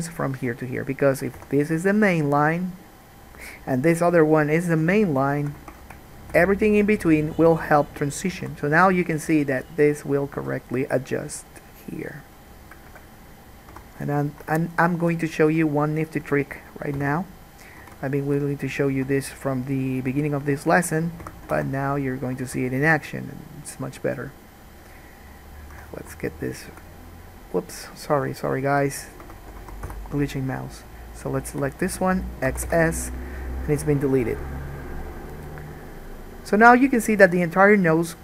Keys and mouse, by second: 1.5 2, 2.3 shift+middle click, 2.4 shift+click, 2.8-4.6 shift+middle drag, 5.9 ctrl+z, 6.2 shift+click, 8.6 alt+a, 10.5 k, 13.0-14.4 drag, 13.9 3, 14.4 middle click, 14.6 shift+click, 15.0 shift+middle click, 15.3 click, 16.0 shift+middle click, 16.4-18.4 drag, 17.2 f, 18.0 alt+a, 18.4 middle click, 18.5 shift+click, 18.9 shift+middle click, 19.2 click, 20.1 middle click, 20.1 shift+click, 20.7 shift+middle click, 21.0-26.6 drag, 21.4 f, 21.7 alt+a, 22.7 alt+a, 23.1 1, 25.9 3, 26.6 shift+middle click, 27.0-28.2 drag, 28.2 middle click, 28.3-38.2 shift+drag, 28.6 shift+right click, 29.4 f, 29.9 alt+a, 30.1 1, 32.7 x.